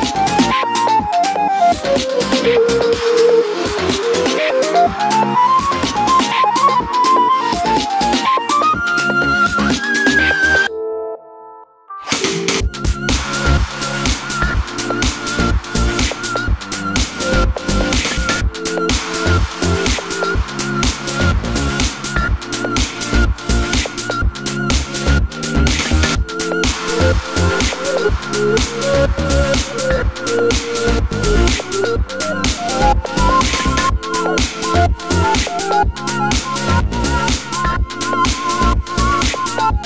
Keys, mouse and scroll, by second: 0.0-1.8 middle drag, 0.3 Tab, 1.3 z, 1.9 3, 2.1 shift+click, 2.2 shift+click, 3.0 click, 3.4 middle click, 3.9 click, 4.2 ctrl+click, 4.4 middle click, 4.6 ctrl+click, 4.8-7.5 middle drag, 5.0 i, 7.3 Escape, 7.7 shift+click, 7.9 i, 9.0 click, 9.1-15.2 middle drag, 11.0 ctrl+z, 11.7 KP_3, 13.3 ctrl+r, 14.8 3, 15.0 click, 15.2 shift+click, 15.5 middle click, 15.8 shift+click, 15.9-31.9 middle drag, 16.3 alt+e, 18.2 Escape, 18.4 ctrl+z, 18.7 e, 21.1 click, 23.5 ctrl+z, 27.8 e, 28.0 Return, 28.2 s, 31.1 ctrl+z, 31.9 shift+click, 32.0-33.9 middle drag, 32.3 e, 32.5 scroll up 1, 32.9 s, 33.9 click, 33.9-36.4 middle drag, 34.1-34.9 scroll down 2, 34.2 Tab, 34.4 click, 35.8 scroll up 2, 36.4-37.9 shift+right drag, 37.9 shift+a, 38.3 Tab, 38.3 s, 39.0 click, 39.1 shift+middle click, 39.2 scroll up 2, 39.4 s, 39.6 click.